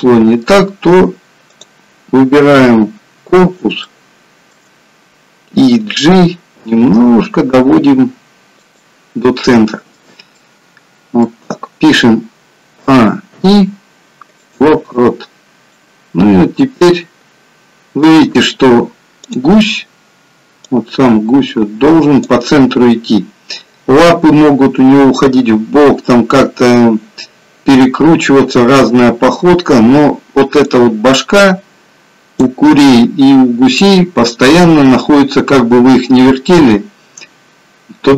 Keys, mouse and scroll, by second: 1.7 click, 2.7 KP_7, 3.9 shift+middle click, 4.8-5.5 scroll up 2, 6.6 g, 9.5 middle click, 12.9 a, 13.4 i, 16.0 click.